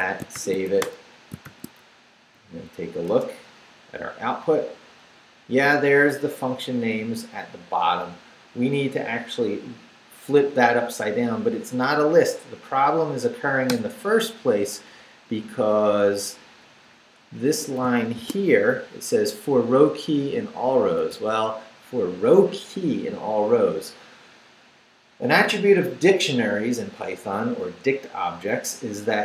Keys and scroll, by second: 0.3 shift+;, 0.6 shift+w, 0.8 Return, 1.3 shift+Return, 1.4 shift+;, 1.9 shift+Up, 3.0 Return, 13.7 Return, 15.0 Down, 16.5 Down, 17.8 shift+Down, 18.1 shift+v, 20.1 Right.